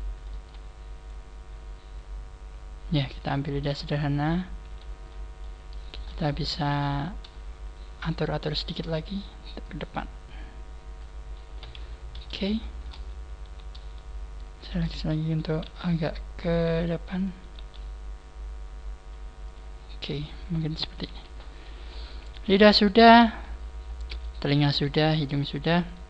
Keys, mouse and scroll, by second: 0.2 z, 0.5 middle click, 4.1-4.5 scroll up 4, 4.5 a, 5.0 middle click, 5.7 alt+shift+right click, 6.6 alt+shift+right click, 7.6 alt+shift+right click, 8.1 alt+shift+right click, 8.8 middle click, 9.5 click, 11.5 KP_3, 12.1 scroll down 4, 12.5 shift+middle click, 13.0 scroll, 13.4-13.8 scroll up 3, 13.4 a, 14.4 alt+shift+right click, 15.6 g, 16.4 click, 16.6 r, 17.5 click, 17.5 g, 19.5 click, 19.8-20.2 scroll down 4, 20.2 middle click, 21.1 z, 21.2 scroll down 2, 21.5 middle click, 22.4 Tab, 22.6 scroll down 1, 23.0 middle click, 23.8 scroll up 1, 24.7 shift+middle click, 25.2 shift+middle click.